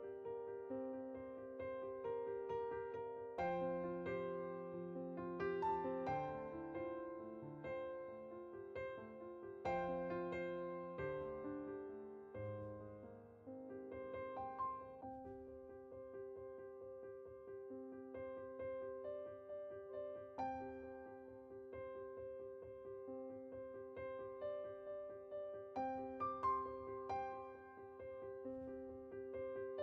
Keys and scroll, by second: 0.2 /, 1.8-5.2 typing.